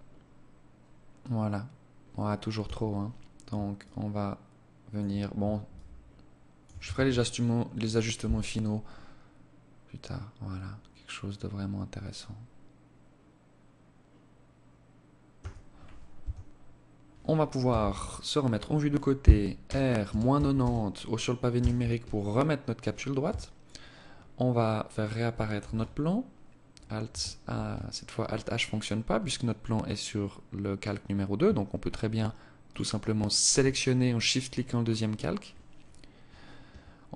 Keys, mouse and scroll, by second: 1.6 Escape, 2.8 shift+click, 4.6 shift+click, 5.8 ctrl+s, 14.2 Escape, 15.0 Tab, 16.5 KP_3, 18.5 r, 21.1 scroll down 4, 22.1 KP_7, 22.9-23.2 scroll down 4, 24.4 alt+h, 26.3 alt+h, 28.7 click, 31.6 shift+click, 32.2 shift+click, 33.8-34.2 scroll up 7, 36.2 right click, 36.8 right click.